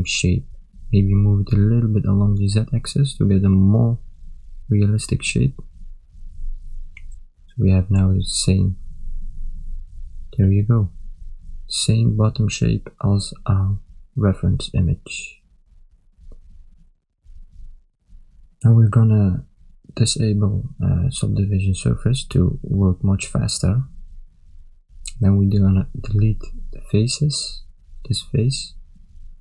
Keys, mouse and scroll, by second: 1.1 g, 4.7 Tab, 5.7 ctrl+middle click, 6.4 shift+middle click, 9.5 ctrl+middle click, 10.9 middle click, 11.9 ctrl+middle click, 12.6 middle click, 13.7 middle click, 14.5 ctrl+middle click, 15.1 middle click, 16.1 KP_1, 16.8 ctrl+middle click, 17.9 shift+middle click, 19.6 click, 20.5 shift+middle click, 21.4 ctrl+middle click, 22.3 Tab, 23.9 middle click, 25.0 click, 25.9 x, 29.1 ctrl+middle click.